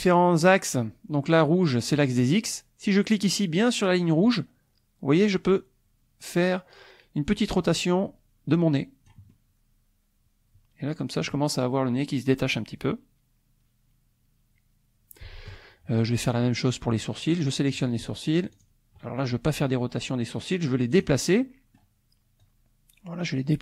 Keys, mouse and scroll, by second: 4.9-9.3 drag, 16.0 click, 17.5 click, 18.7 shift+click, 20.9 click, 21.4 click, 22.4-23.6 drag.